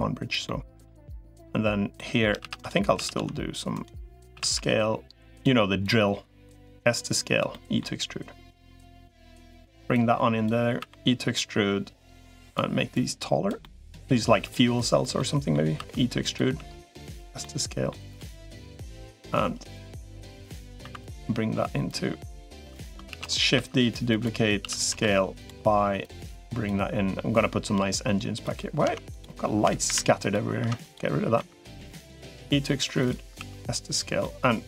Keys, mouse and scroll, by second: 0.2 middle click, 1.7 middle click, 2.2 shift+d, 2.8 s, 4.2 s, 5.6-7.2 drag, 7.3 middle click, 8.4 click, 9.8 click, 10.6 e, 12.2 click, 12.8 click, 13.4 middle click, 14.2 click, 15.0 middle click, 15.6 e, 16.2 s, 17.2 middle click, 18.1 middle click, 18.8 middle click, 19.9 middle click, 20.8 click, 20.8 2, 21.6 click, 22.4 3, 23.0 shift+d, 23.4 s, 24.4 s, 25.8 click, 27.2-28.2 drag, 28.6 Tab, 29.8 Delete, 30.0 click, 30.4 Tab, 30.6 click, 31.2 e, 33.2 s, 34.0-34.6 middle drag.